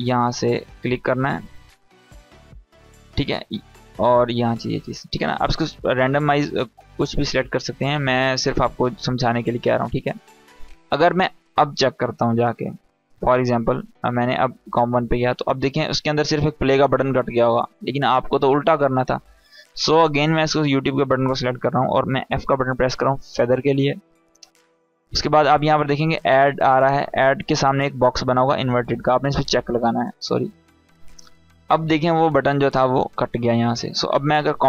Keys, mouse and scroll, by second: 14.2 click, 15.4-16.6 scroll down 1, 18.3 click, 21.9 f, 29.0 click, 30.9-31.9 scroll down 1, 34.4 click.